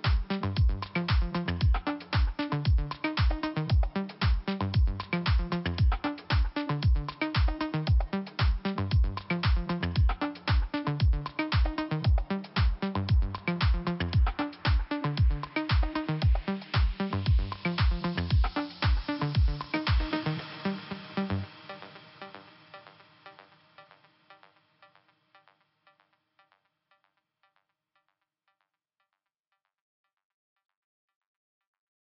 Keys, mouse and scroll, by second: 0.0 click, 0.9 click, 1.9 click, 2.0 click, 3.1 Delete, 4.0 click, 5.1 click, 5.2 click, 5.4 Delete, 8.3 click, 8.3 click, 9.3 click, 9.4 click, 9.5 click, 9.6 double click, 14.3 click, 15.3 click, 16.8 click, 18.3 click, 19.0 click, 19.8 scroll down 1, 20.9-21.4 scroll up 2, 21.4 click, 23.7 click, 23.7 click, 25.5 click, 27.4 click, 28.8 click, 30.4 click, 31.9 click.